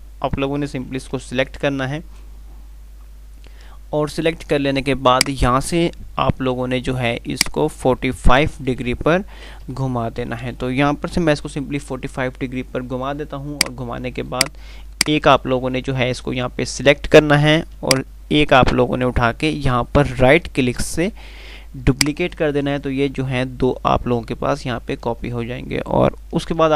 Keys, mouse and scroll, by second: 1.5 ctrl+q, 5.4-6.0 click, 8.6 BackSpace, 13.8-22.2 drag, 22.2 ctrl+right click.